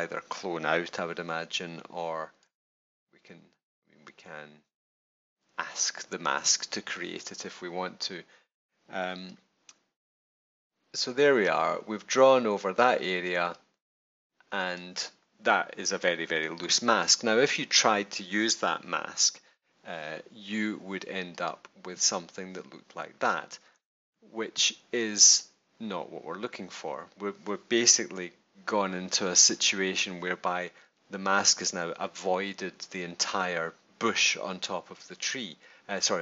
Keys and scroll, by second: 28.1 super+-.